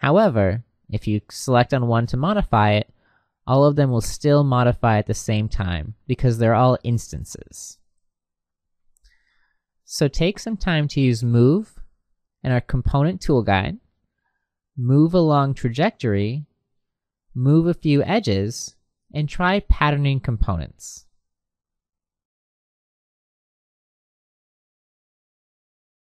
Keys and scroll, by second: 5.3 Escape, 7.7 h.